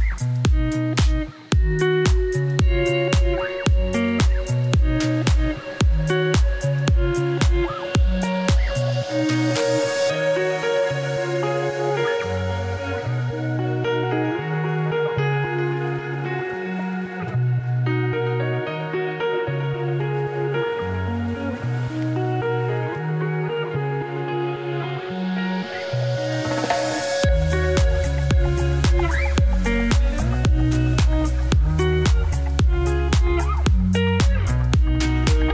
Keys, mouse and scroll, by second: 0.3 scroll up 2, 0.6 middle click, 1.3 1, 1.5 middle click, 1.9 z, 2.4 middle click, 3.0 click, 3.8 shift+click, 5.0 m, 6.3 click, 6.9 ,, 7.4 m, 8.2 click, 8.7 m, 9.4 click, 10.0 m, 10.8 middle click, 11.4 scroll down 1, 11.6 KP_1, 13.0 middle click, 13.7 KP_1, 14.2 click, 16.4-17.7 middle drag, 17.7 click, 18.0 g, 19.1 click, 19.3 middle click, 19.4 g, 20.8 middle click, 21.1 2, 21.2 click, 21.9 f, 22.5 click, 22.8-23.2 f, 23.7 middle click, 23.8 scroll down 2, 24.1-26.8 middle drag, 26.8 scroll up 1, 27.0 middle click, 27.5 1, 27.8 click, 29.5 scroll down 1, 29.7 middle click, 30.1 KP_1, 32.0 middle click, 32.8 scroll up 1, 33.0 middle click, 33.6 m, 34.3 click, 34.6 middle click, 34.8 m, 35.3 click.